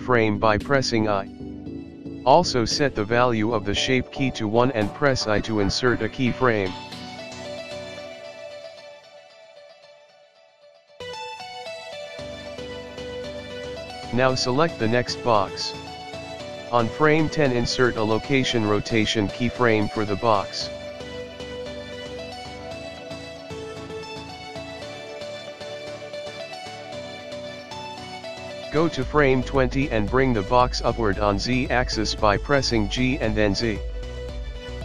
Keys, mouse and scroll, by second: 0.9 click, 0.9 i, 7.1 i, 13.7 click, 16.5 click, 27.2 click, 31.8 g.